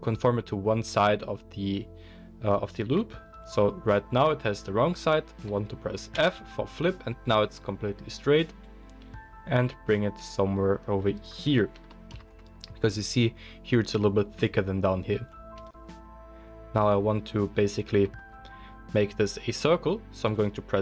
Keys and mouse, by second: 16.8 click, 16.9-20.8 middle drag, 20.7 n.